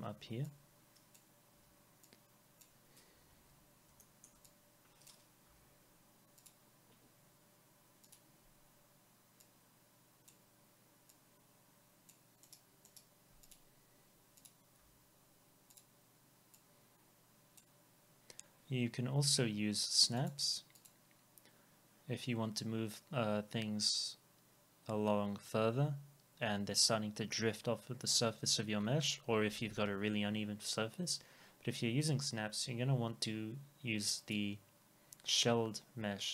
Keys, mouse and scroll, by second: 1.5 Delete, 3.3 ctrl+z, 4.0 alt+middle click, 5.5 Delete, 12.5 right click, 14.8 Delete, 20.2-22.2 drag.